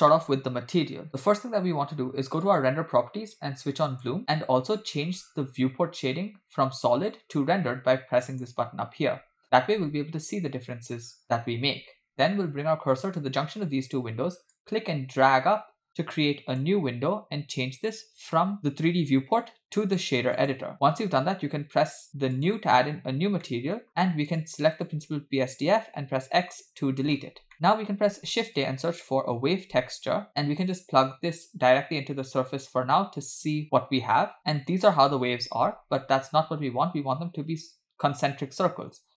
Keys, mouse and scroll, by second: 1.1 middle click, 2.6 click, 4.1 click, 10.9 click, 15.0-16.7 drag, 17.8-20.6 drag, 22.4 click, 23.5 middle click, 23.9-24.3 scroll up 4, 24.3 click, 26.2 x, 27.5 middle click, 28.0 shift+a, 31.1 click, 34.4-37.4 scroll up 4, 38.9-39.1 scroll up 3.